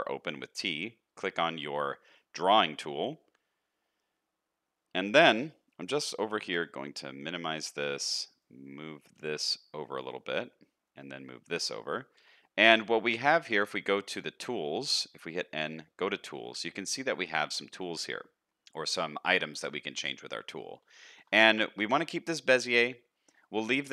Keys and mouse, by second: 6.5 t, 9.5-12.2 drag, 12.2 n, 20.9 shift+middle click.